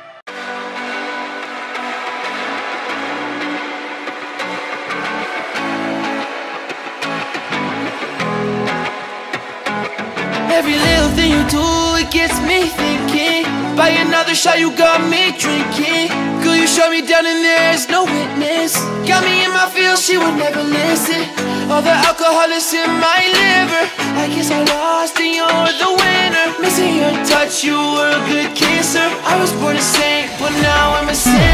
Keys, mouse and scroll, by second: 0.8 click, 4.9 click, 5.6 click, 6.0 Return, 6.8-8.0 alt+scroll up 3, 8.1 scroll down 1, 8.6 scroll down 1, 9.0-9.3 scroll up 1, 9.9 click, 10.9 click, 14.1 scroll down 1, 15.9 click, 19.4 alt+scroll down 1, 19.8 click, 21.0 ctrl+o, 22.2 click, 24.8 click, 25.2 scroll up 1, 25.4 click, 25.9 ctrl+v, 26.5 click, 27.1 ctrl+t, 27.9 click, 28.5-29.0 alt+scroll down 2, 29.2 ctrl+t, 29.6 click, 30.3 click, 31.0 click, 31.3-31.5 drag.